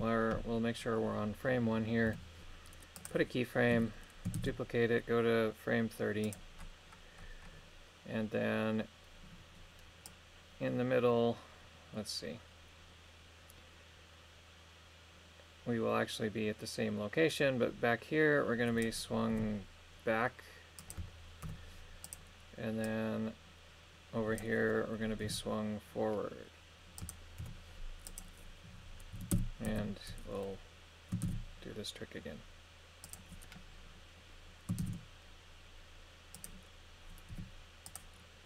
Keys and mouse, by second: 2.1 i, 4.4 shift+d, 6.2 click, 10.1-18.9 drag, 19.3 r, 20.8 click, 21.4 i, 22.9-24.4 drag, 25.2 r, 27.0 click, 27.4 i, 29.1 a, 29.3 a, 29.7 a, 31.2 shift+d, 33.0 click, 34.8 shift+d, 37.3 g, 37.9-38.4 drag.